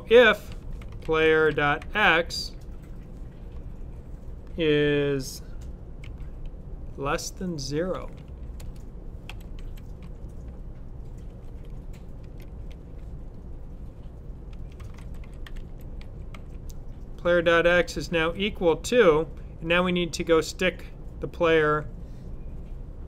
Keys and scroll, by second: 0.3-2.2 typing, 5.9 shift+,, 7.7-9.5 typing, 11.2 typing, 14.6-16.7 typing, 18.1 typing.